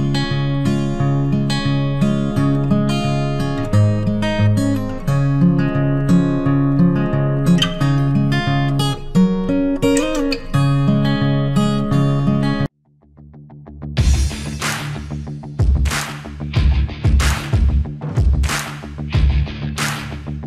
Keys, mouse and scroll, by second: 3.7 click, 12.6 typing, 15.3 click, 16.0 typing, 17.0 click.